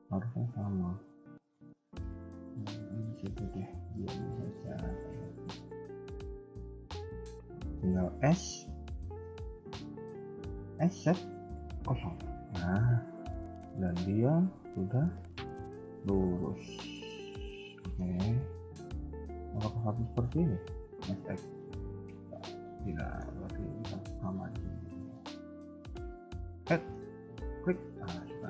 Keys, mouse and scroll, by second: 3.0 c, 3.9 middle click, 5.6 shift+click, 6.1 shift+click, 6.2 KP_1, 6.4 KP_3, 7.0 shift+middle click, 8.1 s, 12.8 scroll down 2, 12.8 s, 13.0 middle click, 18.1 KP_3, 18.4 KP_1, 19.7-20.8 scroll up 2, 20.8 s, 22.8 middle click, 24.3 shift+click, 25.8 shift+click, 26.4 middle click, 27.2 shift+click, 27.6 middle click, 28.2 KP_3.